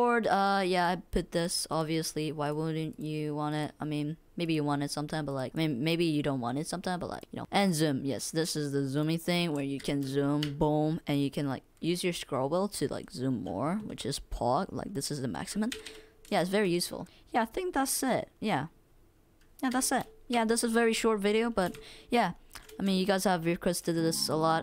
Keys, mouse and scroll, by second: 21.7 w, 21.9 space, 23.7 click, 23.7 right click, 23.9 click, 24.4 click.